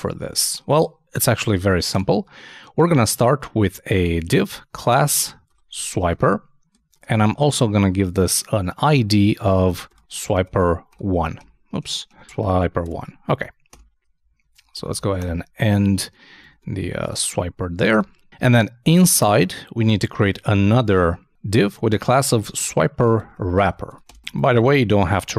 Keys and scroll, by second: 1.4 shift+super+Left, 1.9 shift+super+BackSpace, 6.4-7.4 typing, 14.3 super+Down, 14.4 super+Right, 14.7 super+e.